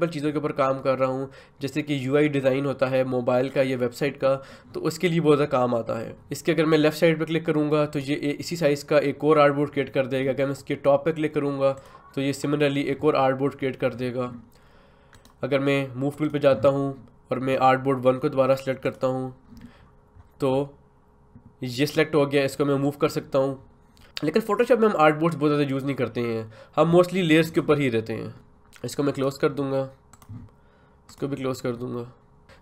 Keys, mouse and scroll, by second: 7.9 click, 11.7 click, 15.1 right click, 16.1 click, 17.3-18.8 scroll down 1, 18.8 click, 19.8 scroll down 1, 22.8 click, 29.1 click.